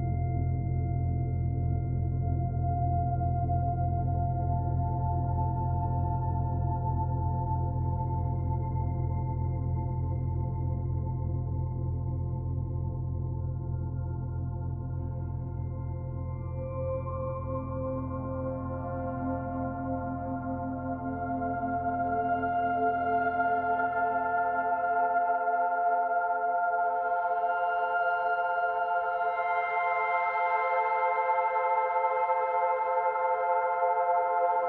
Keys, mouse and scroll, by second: 1.6 s, 5.6 middle click, 6.8 click, 8.6 middle click, 9.9 click, 11.2 middle click, 14.1 shift+d, 15.5 click, 17.5 click, 20.2 middle click, 21.4 click, 22.0 middle click, 25.0 s, 28.3 click, 30.4 middle click, 31.1 click, 31.7 click, 32.5 middle click, 33.2 middle click.